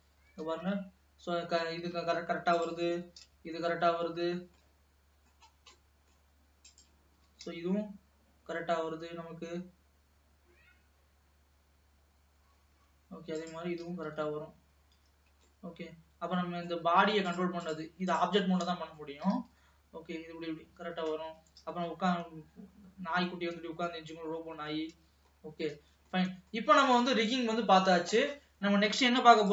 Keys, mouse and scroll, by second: 0.4 g, 2.6 click, 3.1 g, 4.8 middle click, 5.5-6.1 scroll up 2, 6.1 middle click, 6.7 click, 7.4 g, 13.5 click, 14.3 g, 16.0-17.4 middle drag, 17.4 click, 18.7 middle click, 19.3 r, 21.7 g, 25.5-26.0 scroll down 3, 26.0 ctrl+s, 26.3 middle click, 27.0 ctrl+s.